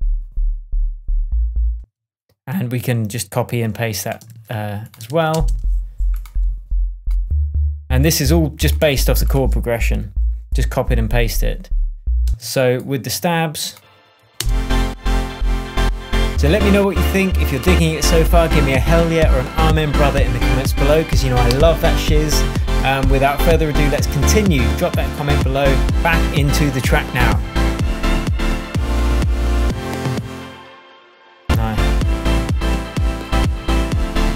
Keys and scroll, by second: 1.7 space, 4.2 super+c, 5.0 super+v, 5.3 super+space, 6.3 space, 10.5 shift+super+j, 11.0 super+j, 12.2 space, 13.1 super+space, 14.3 super+space, 15.2 space, 30.2 space.